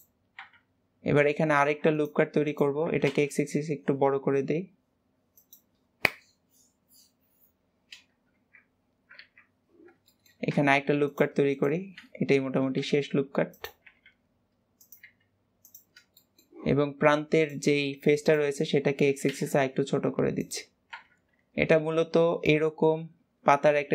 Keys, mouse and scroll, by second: 0.2 KP_1, 1.4 ctrl+r, 10.0 shift+middle click, 10.6 ctrl+r, 16.0-17.2 middle drag, 17.2 click, 18.1 click, 18.4 middle click, 18.9 s, 20.8 KP_1.